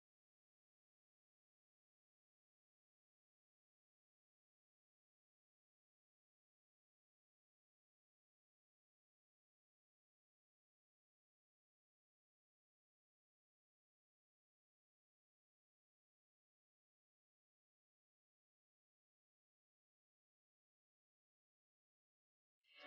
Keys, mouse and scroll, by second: 1.9-3.3 drag, 6.0-7.2 typing, 7.6 Return, 8.1 click, 8.8 right click, 9.3 click, 9.6 right click, 10.5 shift+t, 10.7 click, 12.1-13.7 drag, 13.7 ctrl+scroll up 1, 15.9 click, 16.6 ctrl+t, 17.1 click, 17.3 right click, 17.5 scroll down 1, 19.8 scroll up 1, 20.3 scroll down 1, 20.7 scroll up 1, 21.3-21.6 scroll down 1, 22.8 click.